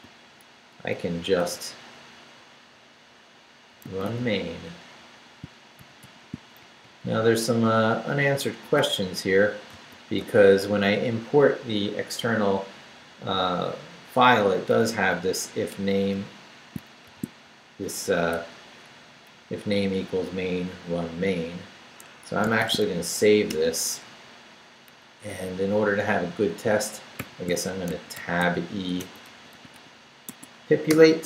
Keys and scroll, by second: 1.4 shift+i, 3.5-6.5 typing, 6.6 shift+Down, 7.4 Left, 8.7 BackSpace, 9.7 space, 14.5 Up, 15.1 Down, 17.0 shift+v, 17.4 shift+Down, 17.9 Up, 18.3 BackSpace, 19.0 Down, 19.3 Up, 20.7 Down, 21.3 Up, 22.0 Escape, 22.4-23.3 typing, 23.5 Return, 27.2-30.2 typing, 30.3 Tab, 30.9 Return.